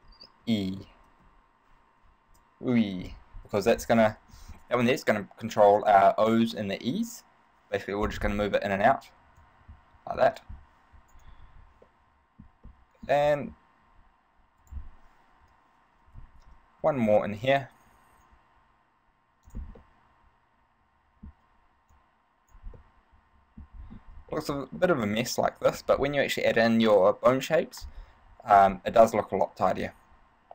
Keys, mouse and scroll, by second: 3.9 middle click, 9.7 click, 11.6 ctrl+z, 12.1 middle click, 12.9 middle click, 14.8 right click, 15.6 KP_3, 17.0 shift+d, 19.7 click, 20.1 middle click, 22.1 click, 23.1 middle click, 23.9-24.2 scroll up 3, 24.5 shift+middle click, 25.0 middle click, 29.2 middle click.